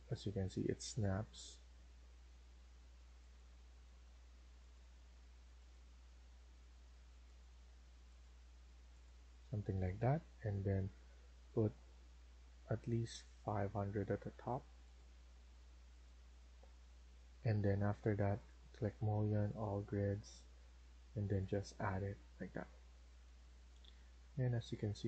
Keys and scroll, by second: 13.6 Escape, 13.9 Escape, 14.2 Escape, 14.4 Escape, 16.4 Escape, 16.6 Escape, 21.8 Escape, 22.0 Escape, 22.2 Escape.